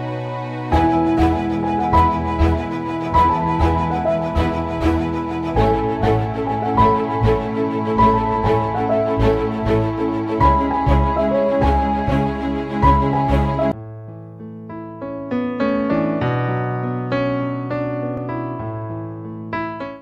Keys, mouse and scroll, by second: 0.0 typing, 2.2-6.3 drag, 6.1-7.0 typing, 6.4 click, 8.6 ctrl+s.